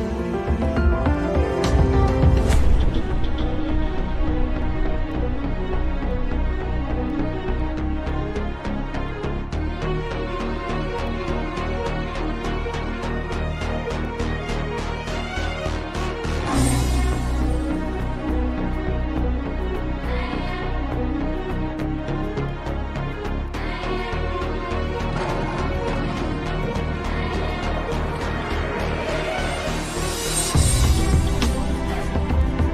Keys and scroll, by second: 0.9 shift+F2.